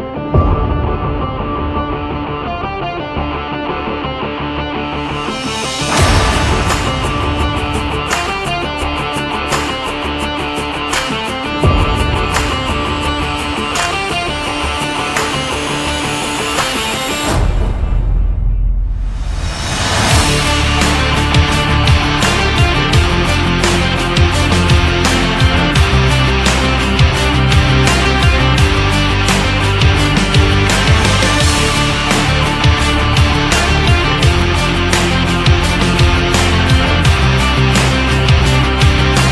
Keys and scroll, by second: 10.7 ctrl+z.